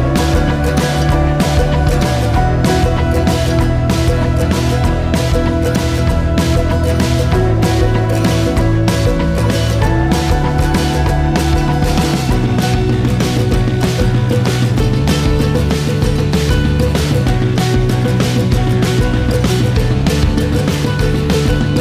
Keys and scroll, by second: 1.9-2.4 typing, 3.1 Return, 7.9 a.